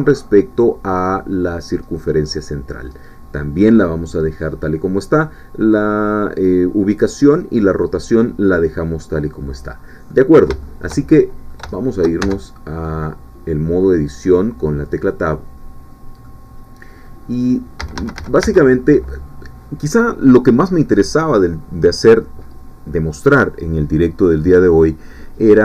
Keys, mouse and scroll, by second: 1.3-3.0 middle drag, 8.9 middle click, 9.7-10.1 scroll up 1, 10.1-11.7 middle drag, 11.7 shift+middle click, 12.5 shift+Tab, 13.0-16.4 middle drag, 16.9-17.2 scroll up 2, 17.5-17.8 scroll down 2, 17.8 a.